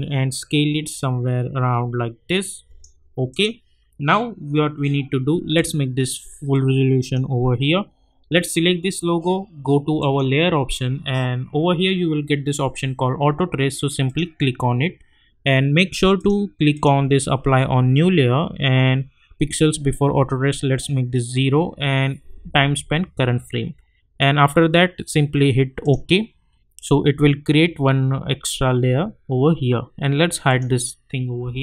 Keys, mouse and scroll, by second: 5.5-8.4 drag, 14.0 click, 25.8 click, 30.5 click.